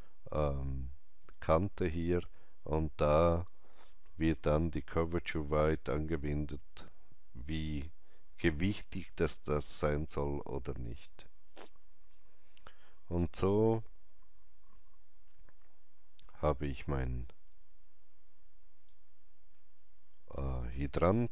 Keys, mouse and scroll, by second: 11.2-13.7 alt+drag, 11.4 alt+right click, 12.8 alt+middle click, 13.7-21.3 alt+drag, 19.5 alt+middle click, 20.7 alt+right click.